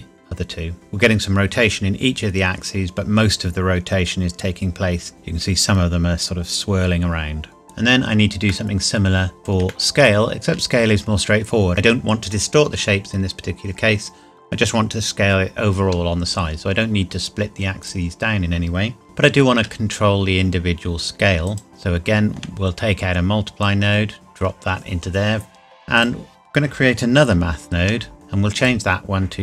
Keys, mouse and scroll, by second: 5.2 shift+middle click, 7.6 middle click, 8.0 scroll down 1, 8.5 shift+middle click, 9.4 scroll up 1, 9.7 shift+middle click, 17.8 click, 19.0 shift+d, 21.4 click, 21.7 shift+middle click, 22.4-23.6 shift+scroll up 1, 23.6 click, 25.9 click, 27.2 shift+d, 28.1 click.